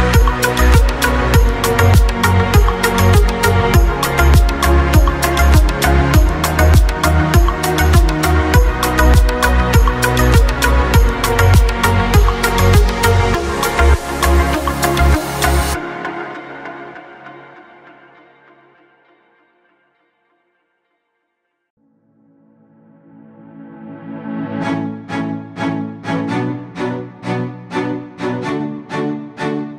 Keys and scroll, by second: 0.0-0.7 typing.